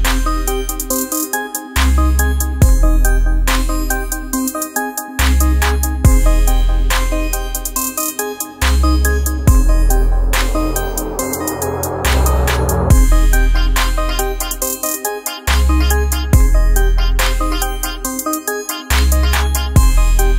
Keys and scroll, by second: 6.3 space, 7.0 ctrl+space, 14.2 alt+space, 16.1 ctrl+g, 17.1 space, 19.7 space.